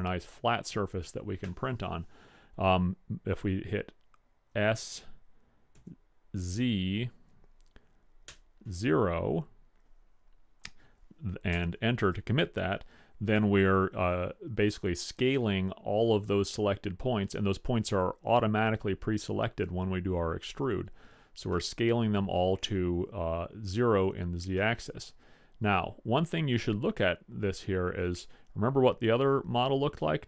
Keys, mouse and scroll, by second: 4.9 s, 15.1-18.3 middle drag, 21.8-26.8 middle drag, 29.7-30.2 middle drag.